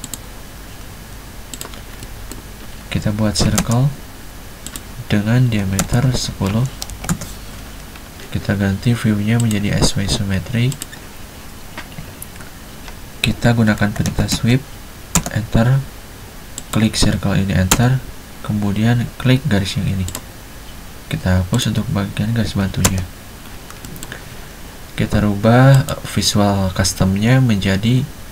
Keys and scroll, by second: 3.5 c, 3.6 space, 5.9-7.2 typing, 13.9-15.2 typing, 17.9 space, 22.7 e, 22.9 space.